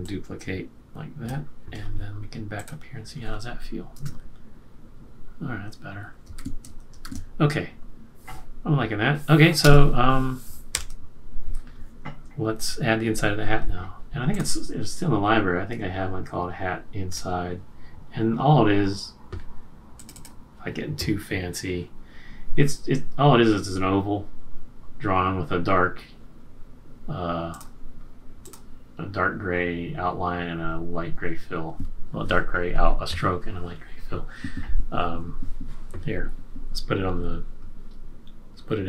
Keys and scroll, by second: 3.9 Return, 6.3 super+-, 7.1 super+-, 10.7 super+s.